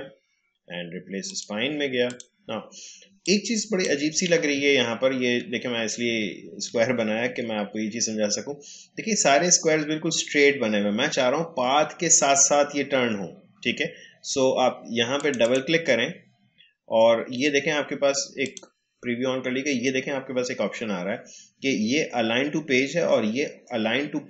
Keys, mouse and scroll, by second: 1.3-4.6 drag, 4.6-5.1 alt+scroll up 1, 6.1 alt+scroll down 1, 8.7 alt+scroll up 1, 15.1 click, 18.4 click.